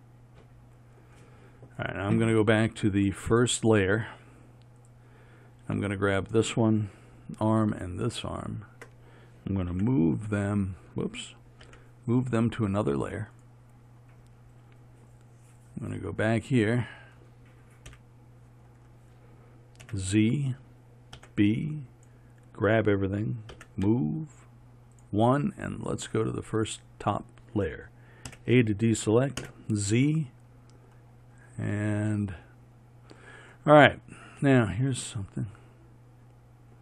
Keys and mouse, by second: 5.0-13.4 drag, 15.9-18.0 drag, 18.0 KP_1, 20.0 z, 21.3 b, 23.6 m, 27.1-28.4 drag, 28.4 a, 29.5 z, 34.7-36.8 middle drag.